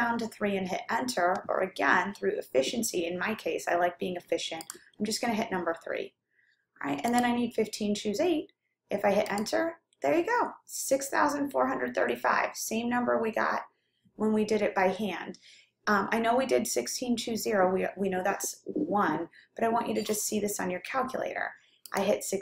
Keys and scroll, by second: 4.7 3, 7.4 8, 9.4 Return, 22.2 1.